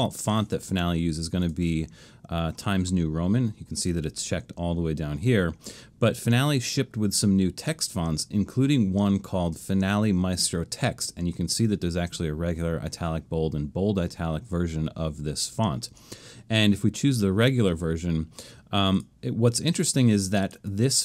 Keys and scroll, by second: 0.0 shift+Left.